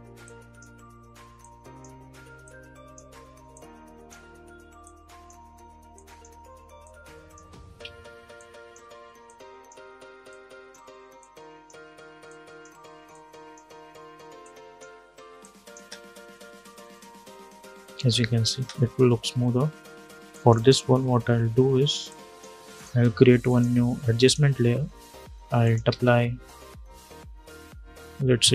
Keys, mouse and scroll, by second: 2.5 click, 3.5-4.5 drag, 4.8 click, 6.8 ctrl+click, 7.5 ctrl+z, 8.1-15.7 drag, 15.7 space, 18.2 space, 20.0 click, 22.5 right click, 23.2 click, 25.6 ctrl+a, 28.1-28.5 typing.